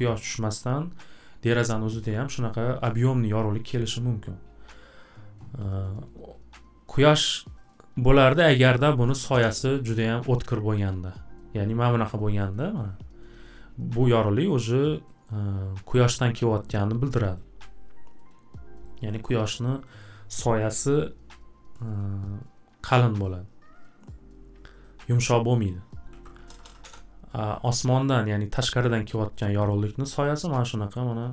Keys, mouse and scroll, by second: 7.6 click, 7.7 click, 8.7-9.8 typing, 12.6 scroll, 13.6-15.1 middle drag, 13.6 typing, 15.2 scroll, 16.1 scroll, 17.6 scroll, 19.1-20.3 scroll, 24.6 click, 24.8 click, 25.8-27.0 typing, 30.2 scroll.